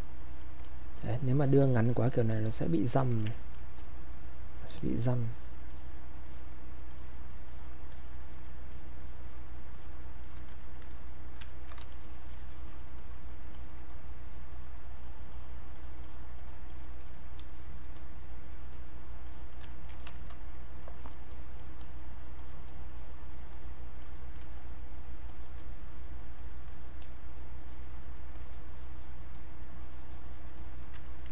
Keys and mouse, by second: 1.2 alt+click, 3.2 alt+click, 3.3 ctrl+right click, 3.8 click, 6.9 alt+click, 9.7 alt+click, 10.6 ctrl+right click, 10.6 ctrl+right click, 10.9 ctrl+click, 11.5 ctrl+right click, 11.9-13.6 shift+drag, 13.9 click, 18.0 click, 19.7 ctrl+right click, 20.0 click, 21.0 alt+click, 22.4 alt+click, 24.6 alt+click, 28.7 click, 29.8 alt+click, 31.0 ctrl+right click.